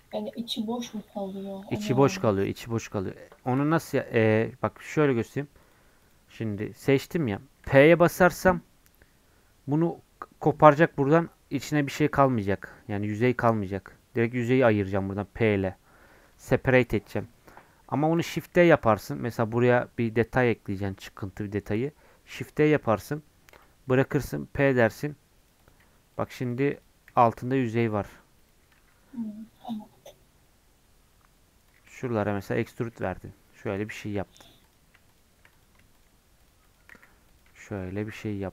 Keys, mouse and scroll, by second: 0.1 g, 1.0 middle click, 1.6 Tab, 1.9 middle click, 2.5 scroll up 3, 2.9 middle click, 3.7 3, 4.0 middle click, 4.8-10.2 drag, 18.2 shift+d, 25.8 Tab, 26.1 click, 27.1 g, 28.8 Tab, 29.5 Tab, 30.8 scroll up 1, 31.5 scroll up 1, 31.7 shift+click, 32.2 e, 32.8 Tab, 33.0 scroll down 2, 33.1 middle click, 33.6 click, 33.9 middle click, 34.3 Tab, 34.3 scroll up 1, 34.7-36.9 drag, 36.9 e, 37.5 Tab, 37.7 click, 37.9 middle click, 38.2 scroll up 3, 38.4 middle click.